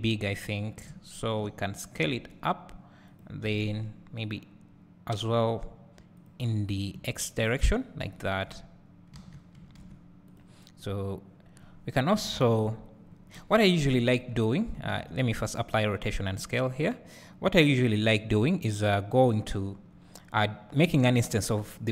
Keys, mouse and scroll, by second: 2.1 s, 3.2 click, 3.6 s, 7.1 `, 8.2 Tab, 8.7 Tab, 9.2 alt+a, 10.4 click, 12.9 scroll down 1, 13.4 KP_7, 15.9 ctrl+a, 17.1-21.9 scroll down 1.